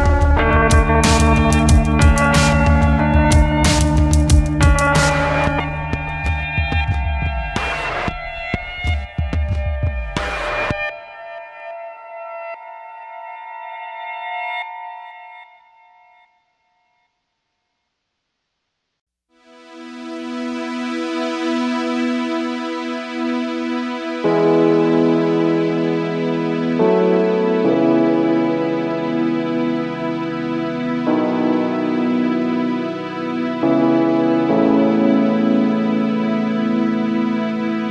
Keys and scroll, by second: 9.0 space, 11.8 space, 35.6 space.